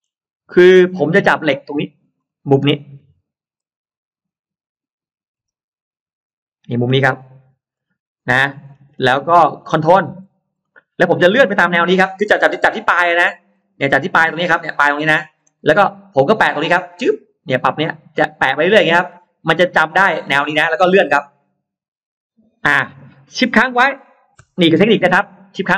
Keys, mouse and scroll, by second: 0.6-1.4 scroll up 2, 1.2 middle click, 1.6 scroll down 1, 2.0-2.6 scroll up 1, 3.7-4.3 scroll up 1, 4.6-5.2 scroll up 1, 5.4 m, 7.6 click, 8.0-8.4 scroll down 2, 8.6-9.5 scroll down 3, 10.4 middle click, 10.6 scroll down 1, 11.5-13.2 scroll up 4, 13.4-13.7 scroll down 2, 15.2 scroll down 2, 20.6-20.9 scroll down 2, 24.7-25.4 scroll down 2.